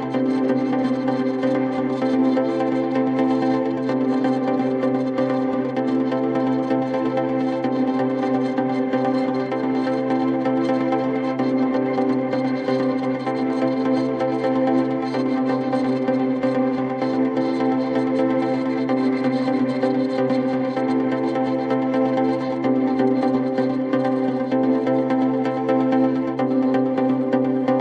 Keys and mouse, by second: 0.1 ctrl+click, 0.6 ctrl+click, 1.1 ctrl+click, 1.5 ctrl+click, 1.8 ctrl+click, 2.3 ctrl+click, 2.4 ctrl+click, 2.8 alt+click, 3.5 ctrl+click, 4.0 ctrl+click, 4.4 ctrl+click, 4.8 ctrl+click, 5.3 ctrl+click, 5.8 ctrl+click, 6.2 ctrl+click, 6.7 ctrl+click, 6.8 ctrl+click, 7.5 ctrl+click, 8.2 alt+click, 8.7 alt+middle click, 10.6 right click, 14.8 alt+middle click, 19.6 right click, 20.1 alt+click, 20.9 alt+middle click, 21.5 alt+middle click, 21.8 alt+click, 27.0 4.